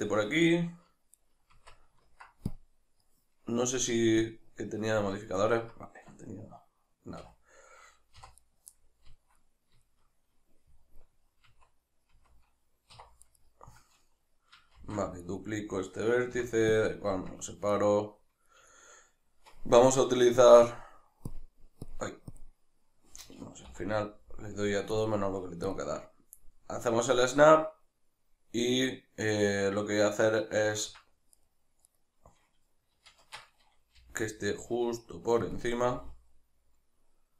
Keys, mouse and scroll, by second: 1.2 right click, 1.5 Tab, 2.5-5.4 drag, 5.4-8.4 ctrl+middle drag, 7.2 2, 8.2 3, 8.4 right click, 8.7-13.2 middle drag, 11.4 Tab, 12.9 1, 13.2 right click, 14.8 shift+d, 15.4 right click, 16.3 p, 17.7-18.7 right drag, 18.7-20.4 shift+middle drag, 20.4-31.3 drag, 23.7 ., 31.3 right click, 31.9 right click, 33.2 shift+Tab, 35.6 click, 35.9 g.